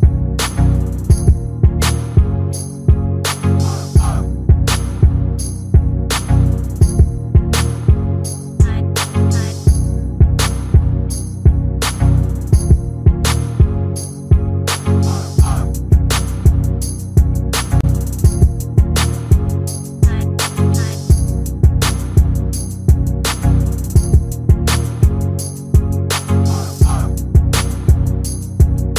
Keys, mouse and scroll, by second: 0.0-0.8 typing, 0.0-0.3 scroll up 5, 0.1 shift+middle click, 0.2 shift+middle click, 0.9 click, 1.8 click, 2.9 click, 2.9 g, 3.3 click, 3.6 g, 3.7 click, 3.7 g, 4.2 click, 4.6 scroll up 5, 4.6 shift+middle click, 4.8 shift+middle click, 5.0 k, 6.1 k, 6.7 shift+middle click, 6.9 click, 7.5 k, 8.8 scroll down 3, 8.9 shift+middle click, 9.1 e, 9.7 shift+middle click, 9.9 click, 10.1 g, 10.2 scroll down 1, 10.7 shift+middle click, 10.7 scroll up 1, 10.8 shift+middle click, 11.3 shift+middle click, 11.3 scroll up 2, 11.9-14.2 typing, 12.1 click, 12.5 click, 13.1 click, 13.4 shift+middle click, 13.4 scroll down 2, 13.5 click, 13.7 click, 14.0 click, 14.4 shift+middle click, 14.4 scroll up 2, 15.3 click, 15.4 g, 16.8 a, 17.0 click, 17.6 click, 18.0 shift+middle click, 18.1 shift+middle click, 19.4 click, 19.4 g, 20.4 click, 21.6 click, 21.8 click, 22.0 middle click, 22.3 scroll up 1, 22.4 click, 22.5 right click, 22.9 middle click, 23.3 click, 23.3 right click, 23.7 middle click, 23.8 click, 24.0 click, 24.2 click, 24.2 f, 24.4 click, 24.6 shift+click, 24.8 shift+click, 24.8 f, 24.9 click, 25.0 middle click, 25.7 click, 25.8 g, 26.1 shift+middle click, 26.5 middle click, 26.9 click, 27.0 shift+click, 27.2 j, 27.5 middle click, 28.4 middle click, 28.7 ctrl+z, 28.9 middle click, 28.9 scroll up 1.